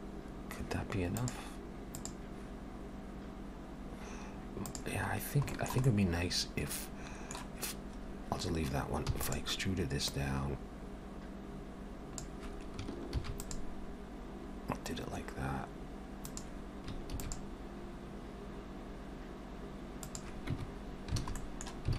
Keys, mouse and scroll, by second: 0.1-1.3 scroll down 2, 5.1-5.5 scroll down 3, 5.5 shift+middle click, 5.9 middle click, 9.3 e, 10.1 click, 13.2 ctrl+r, 17.2 ctrl+r, 20.6 Tab, 20.8-21.2 scroll down 2, 21.4 middle click.